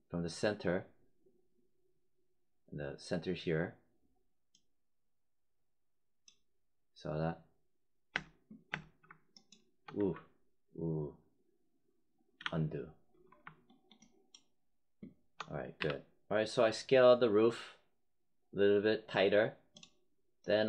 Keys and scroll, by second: 8.1 space, 12.3 z, 15.7 w.